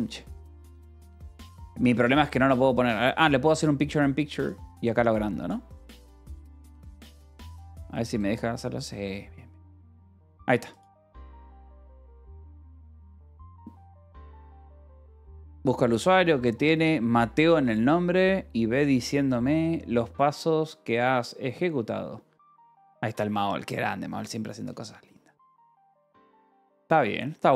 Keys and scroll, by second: 0.4 ctrl+=, 1.6 -, 13.8 space.